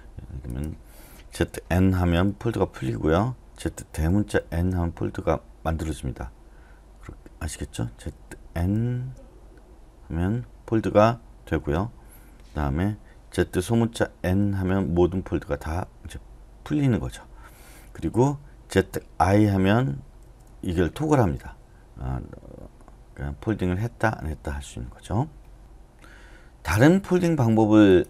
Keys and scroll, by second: 2.0 typing, 4.0-4.4 typing, 8.1-8.8 typing, 11.6 Return, 13.4-17.7 typing, 18.8-21.4 typing.